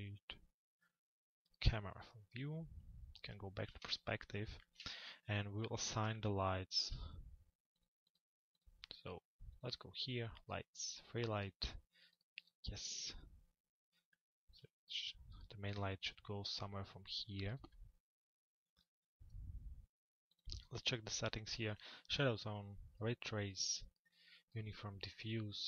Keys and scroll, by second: 3.4 p.